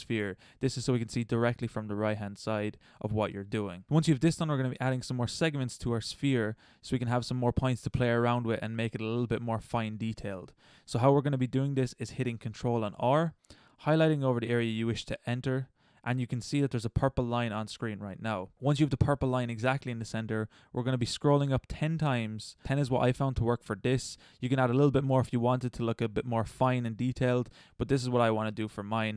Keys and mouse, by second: 12.8 ctrl+r.